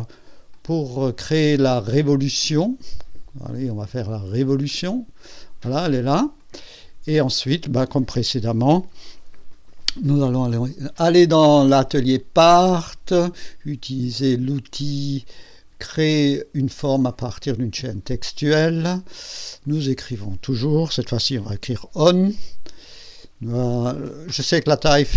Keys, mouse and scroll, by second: 0.5 click, 4.7 click, 6.4 click, 8.8 KP_2, 10.8 click, 11.8 click, 12.0 click, 12.3 click, 17.5 click, 19.6 click, 20.4 click, 21.2 shift+o, 22.4 shift+n, 24.4 click.